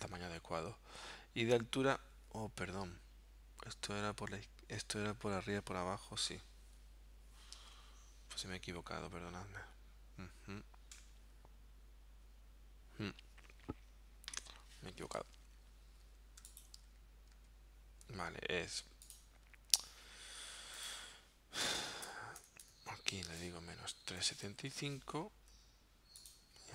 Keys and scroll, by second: 15.3 super+z, 15.9 super+z, 16.9 super+z, 22.4 BackSpace, 23.4-24.8 typing, 25.4 Tab.